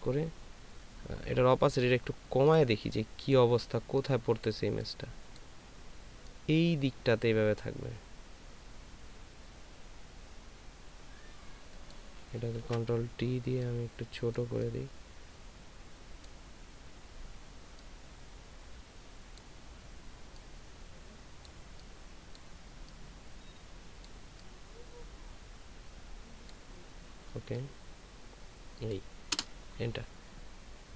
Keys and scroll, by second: 12.6 ctrl+t.